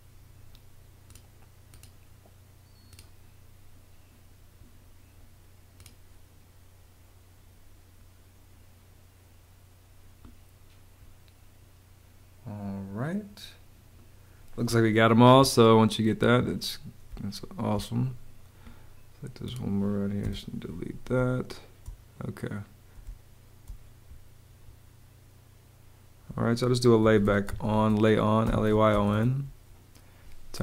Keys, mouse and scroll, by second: 16.1 Escape, 17.0 space, 20.1 BackSpace, 21.0 space, 22.9 space, 26.7-29.3 typing.